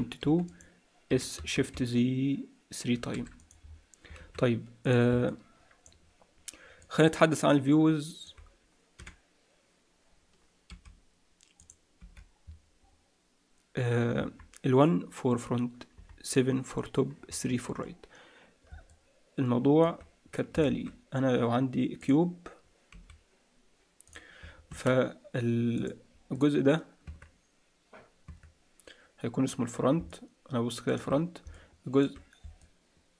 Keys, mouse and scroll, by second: 1.0 s, 3.6-4.2 scroll down 6, 4.2 alt+a, 4.8 click, 5.2 middle click, 6.8 middle click, 9.0 t, 10.6 t, 11.6 click, 12.0 t, 14.2 KP_1, 15.9 KP_7, 17.8-18.6 scroll down 1, 17.8 KP_3, 18.8 middle click, 20.6 shift+a, 22.9 s, 24.6 Tab, 25.7 click, 26.3 click, 27.0 Tab, 28.2 Tab, 29.8 scroll down 3, 30.0 middle click, 31.5 middle click, 32.8 middle click.